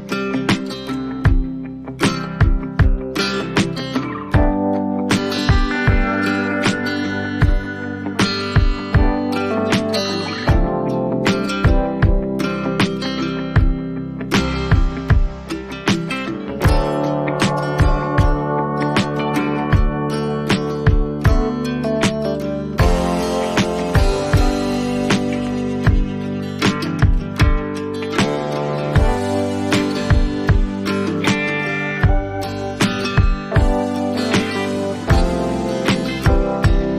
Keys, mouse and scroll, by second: 0.0 click, 3.4 ctrl+z, 5.4 click, 6.5 click, 7.7 click, 16.4 click, 18.4 ], 18.8 ], 19.9 click, 20.7 ], 21.7 right click, 23.2 click, 23.4 click, 24.2 6, 24.4 6, 24.6 6, 25.2 Return, 26.8 click, 28.7 click, 29.4 click.